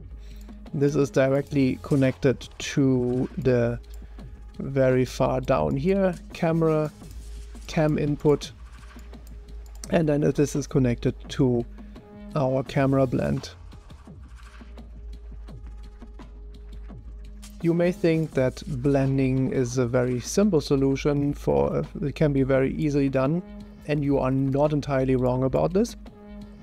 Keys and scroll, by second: 2.5 Delete, 14.7 1.